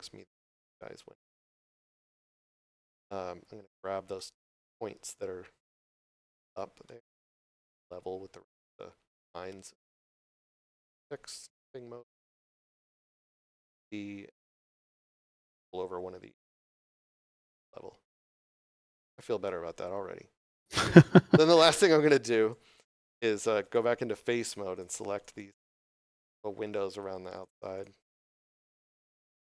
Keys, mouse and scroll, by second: 0.0 right click, 2.8 middle click, 3.6 scroll down 1, 4.0 middle click, 4.7 scroll up 1, 6.7 middle click, 10.0 click, 16.6 click, 17.4 middle click, 18.3 Tab, 19.3 middle click, 21.2 3, 22.3 right click, 23.2 3, 23.5 right click, 24.2 shift+right click, 24.6 shift+right click, 25.0 shift+right click, 25.4 scroll down 1, 25.7 middle click, 28.8 middle click.